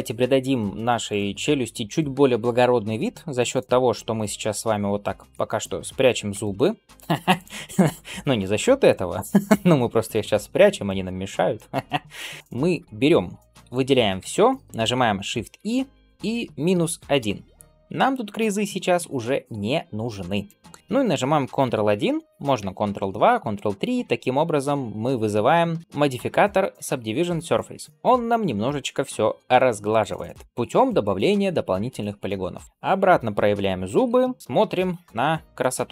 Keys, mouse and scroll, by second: 0.9 click, 3.4 click, 6.2 h, 7.2 click, 10.7-12.3 shift+middle drag, 12.3 scroll up 1, 12.4-13.2 scroll down 1, 14.1 a, 15.4 shift+e, 20.3-20.8 drag, 22.0 ctrl+1, 22.7 ctrl+space, 27.9 click, 29.8-31.7 drag, 32.6 click, 34.4 scroll down 1, 34.6-35.1 middle drag, 35.3 scroll down 2, 35.6 shift+middle drag.